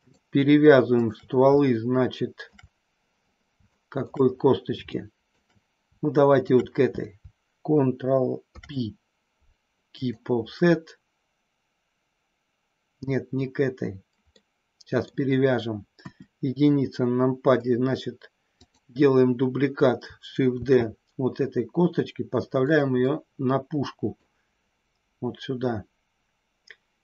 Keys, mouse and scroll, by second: 0.9 shift+click, 1.5-2.5 shift+middle drag, 3.6 shift+middle click, 4.8 shift+middle click, 6.3 shift+click, 8.3 ctrl+p, 14.3 middle click, 15.9 KP_1, 20.6 shift+d, 22.7 click, 23.1-24.2 middle drag.